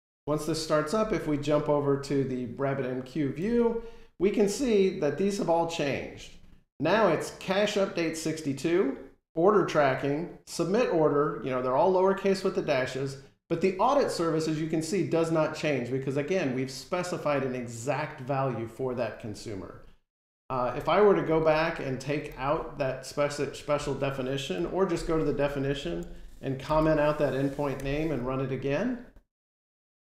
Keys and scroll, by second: 24.4 F12, 27.6 F5.